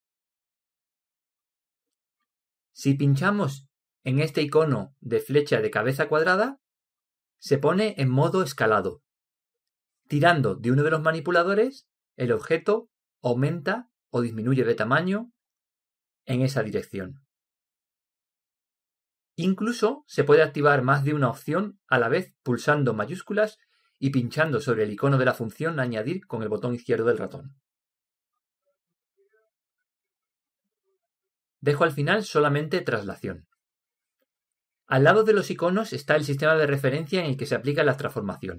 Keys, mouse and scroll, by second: 6.8 click, 11.4 click, 13.4 click, 23.6-30.4 drag, 30.4 click, 33.4 click, 35.2 click.